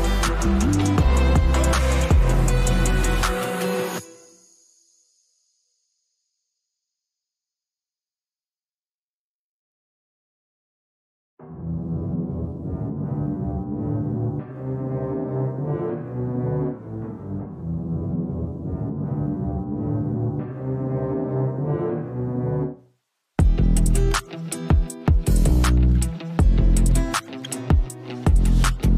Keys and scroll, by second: 0.6 space, 9.4 space, 21.4-22.2 typing.